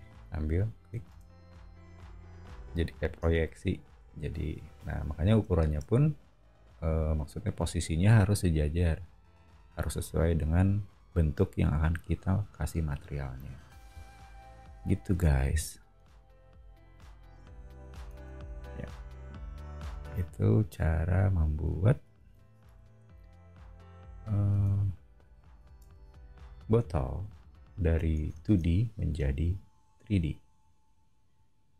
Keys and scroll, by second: 1.1 space, 2.5 b, 3.2 space, 3.6 Escape, 4.1 o, 18.1 space, 20.1 super+e, 22.2 super+g, 22.6 m, 24.6 space, 25.8 BackSpace, 26.8 o.